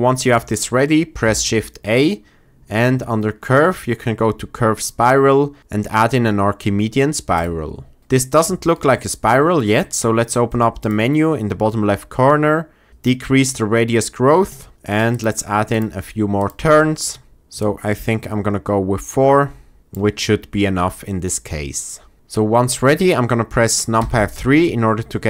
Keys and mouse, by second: 1.2 shift+a, 10.9 middle click, 12.9-14.7 shift+middle drag, 15.0 middle click, 15.6 middle click, 16.3 middle click, 17.5-19.8 shift+middle drag, 23.9 KP_3.